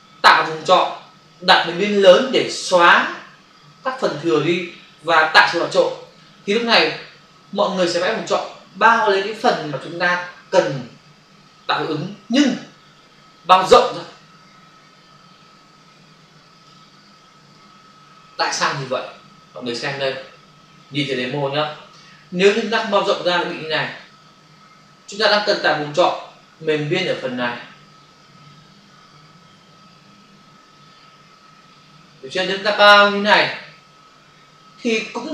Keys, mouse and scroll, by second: 23.8 ctrl+d, 25.8 click.